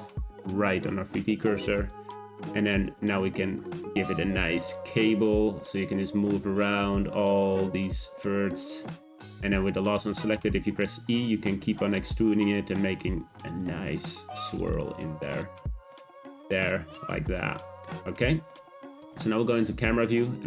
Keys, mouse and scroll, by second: 1.7 click, 2.7 g, 4.0 click, 4.4 g, 5.7 click, 6.1 g, 7.0 click, 7.5 g, 10.3 e, 11.4 e, 12.2 e, 12.9 e, 13.8 e, 14.9 e, 16.9-18.9 middle drag, 18.9 `.